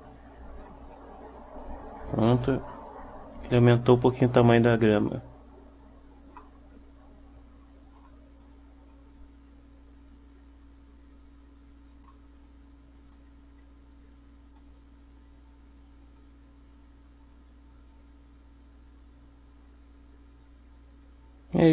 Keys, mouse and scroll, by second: 1.0-6.6 right drag, 1.8-6.6 drag, 6.8 middle click, 7.5 click, 7.5 right click, 8.3 middle click, 8.5-12.3 right drag, 9.0-12.3 drag, 12.5 right click, 13.7 right click, 16.1 click.